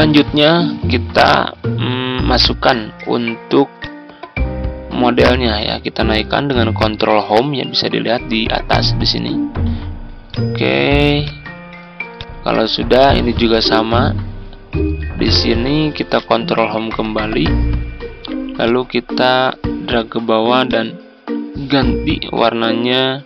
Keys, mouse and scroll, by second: 7.1 Home, 9.3 ctrl+scroll up 1, 10.3 ctrl+click, 11.2 click, 12.5-13.4 ctrl+scroll down 1, 13.4-14.9 drag, 16.1 Home, 17.1 ctrl+scroll up 1, 18.6 ctrl+click, 20.6-23.2 drag.